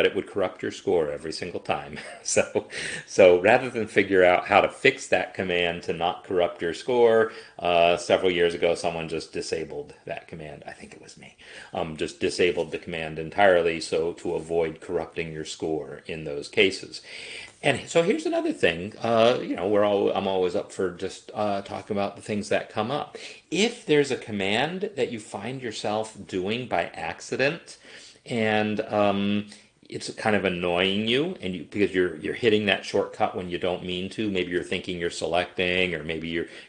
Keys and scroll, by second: 19.4 Escape.